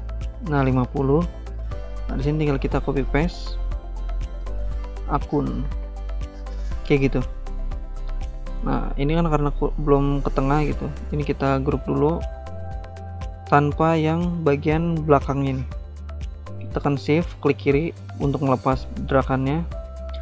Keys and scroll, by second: 1.9 ctrl+c, 2.1 ctrl+v, 5.1-6.3 typing.